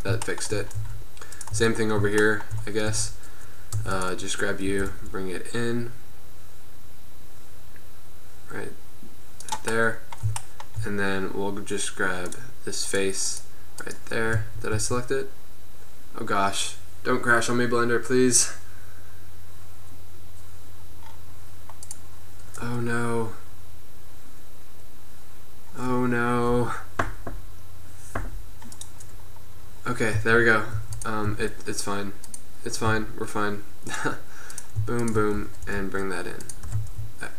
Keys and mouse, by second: 1.0 Tab, 1.7 Tab, 3.3 Tab, 4.1 Tab, 4.2 click, 5.0 g, 12.4-14.4 drag, 30.3 z, 30.8 z, 31.3 z, 33.0 z, 34.0-34.7 drag, 35.5 g, 36.7 g, 36.9-37.3 middle drag.